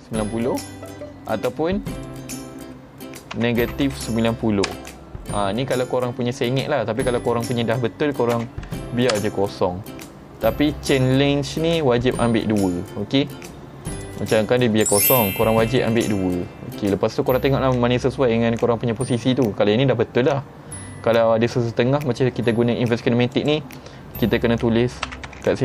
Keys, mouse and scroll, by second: 2.0 click, 7.3 click, 14.0 click, 14.3 click, 15.8 click, 16.1 click, 23.4 click.